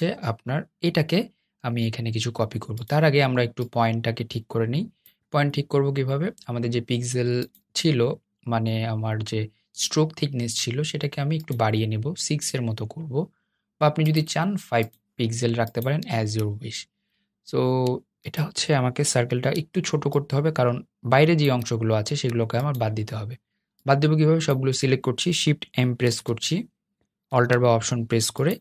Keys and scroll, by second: 25.5 shift+m.